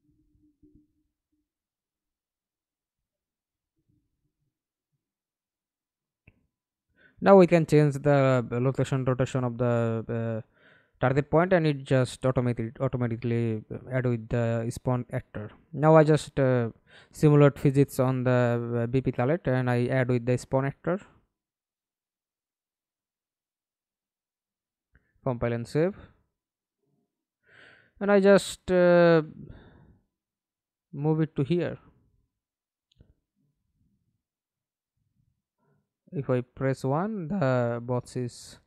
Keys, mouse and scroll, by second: 0.0-3.0 typing, 4.5 Escape, 5.4 middle click, 6.2 f, 6.9 alt+click, 8.0 F11, 9.5 scroll down 1, 20.2-21.9 typing, 25.2-25.8 scroll down 7, 25.9 alt+click, 28.6 alt+click, 28.8 alt+click, 31.3 F11, 31.9 alt+p, 34.6 w, 35.9 1, 37.8 1.